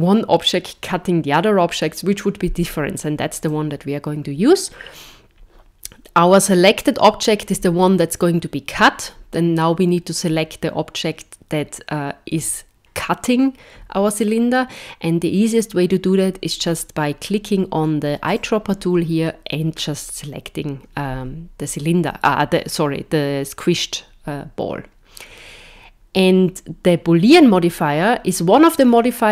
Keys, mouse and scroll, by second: 18.2 click.